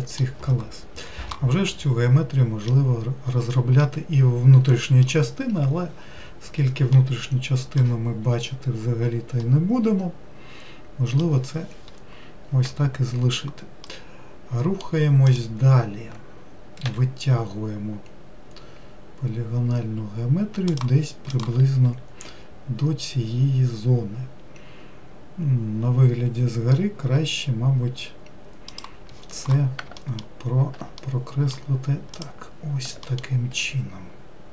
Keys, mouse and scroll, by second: 1.7-5.6 middle drag, 5.6-7.0 scroll up 1, 7.0-8.4 middle drag, 8.4-9.0 scroll up 1, 9.5-12.5 middle drag, 13.9-15.3 middle drag, 15.3 click, 17.0 e, 30.1 alt+middle click, 31.0-32.2 middle drag, 32.2 click, 33.1 alt+middle click.